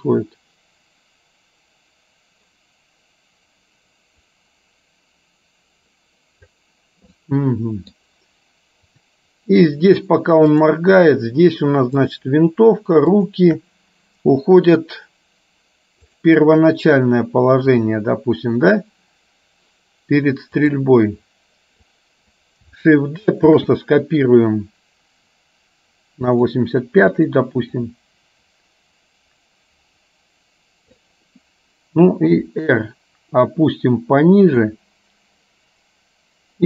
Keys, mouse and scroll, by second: 7.2 middle click, 9.1 click, 10.6 click, 12.1 shift+click, 13.2 shift+click, 16.2 click, 18.0 click, 20.7 click, 22.0 click, 23.7 shift+d, 27.3 click, 28.0-31.2 drag, 32.3 r.